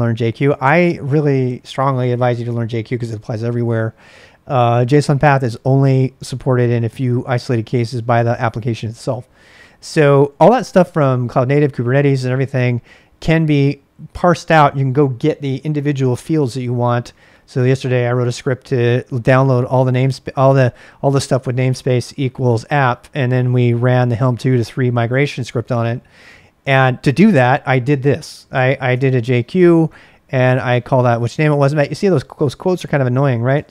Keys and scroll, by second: 9.9 [, 28.9-33.7 typing, 30.7 Return.